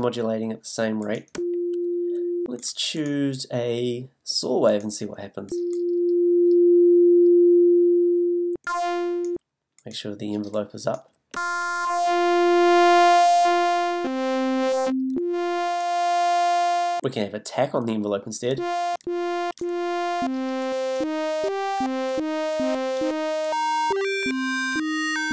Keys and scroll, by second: 1.3 f, 5.5 f, 8.6 f, 11.3 f, 14.0 a, 18.5 f, 23.9 g.